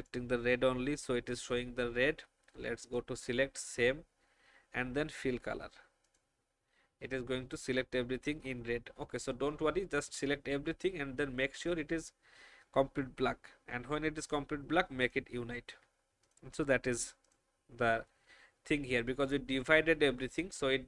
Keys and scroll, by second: 9.9 ctrl+alt+a.